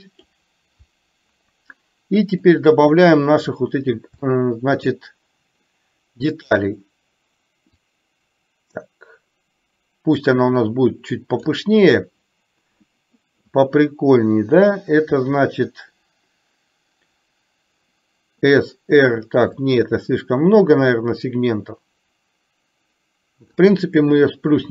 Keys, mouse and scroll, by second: 2.6 click, 4.4 shift+middle click, 8.0-11.6 drag, 19.6-23.5 drag.